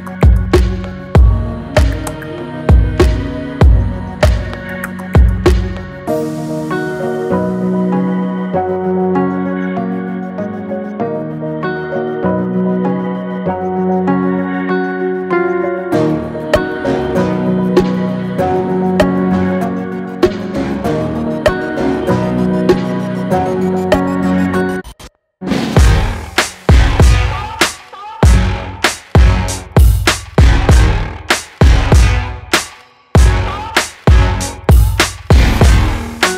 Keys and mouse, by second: 3.8-5.0 middle drag, 5.8 click, 6.9-8.5 drag, 9.3 drag, 9.5-10.1 middle drag, 10.1 drag, 10.5-10.8 shift+middle drag, 11.1-11.6 drag, 13.1-15.0 drag, 16.0-16.8 shift+drag, 18.6 click, 20.2-22.1 drag, 23.6 click, 24.7-26.2 drag, 27.4 middle drag, 27.6 click, 28.9-30.7 drag, 31.6-35.5 drag.